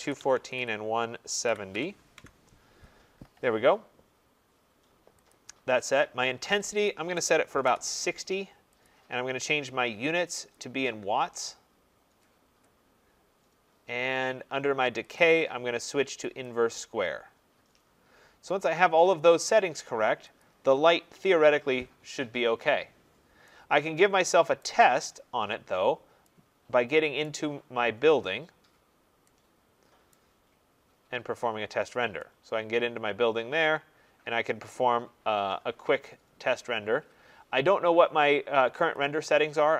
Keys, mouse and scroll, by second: 0.0-1.7 typing, 8.2 click, 8.2 0, 8.9 click, 10.6 click, 15.2 click, 20.4 click, 24.6 right click, 24.9 middle click, 25.0 middle click, 25.0 middle click, 25.8 middle click, 25.9 middle click, 27.2 right click, 27.6 middle click, 27.7 middle click, 27.8 middle click, 28.5 middle click, 28.6 middle click, 28.6 middle click, 30.0 scroll, 30.1 right click, 30.5 middle click, 30.6 middle click, 30.6 middle click, 30.7 middle click, 31.6 middle click, 34.7 right click, 38.9 click.